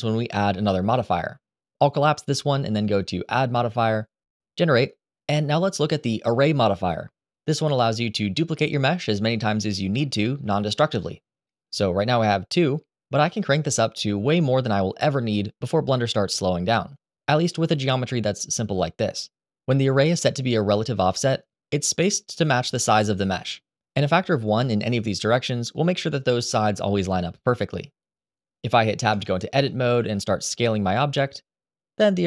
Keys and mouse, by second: 1.5 click, 2.4 click, 3.5-7.3 right drag, 10.5-11.0 middle drag, 11.1 shift+middle drag, 11.5-12.2 middle drag, 13.5-14.9 drag, 16.0-18.2 middle drag, 28.9 Tab, 29.4 middle click, 29.7 a, 30.1 s.